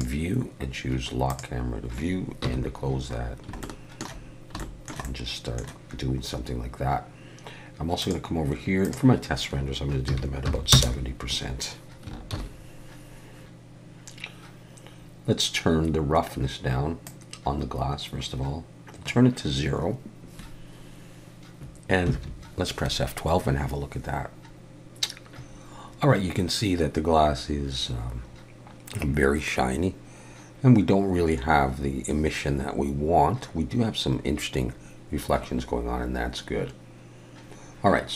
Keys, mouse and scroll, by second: 1.3 click, 2.4 n, 3.2 scroll down 1, 3.6 shift+middle click, 4.3 scroll down 1, 4.6 shift+middle click, 5.0 middle click, 8.0 click, 8.8 click, 12.4 ctrl+s, 13.0 click, 13.0 scroll down 4, 17.0 click.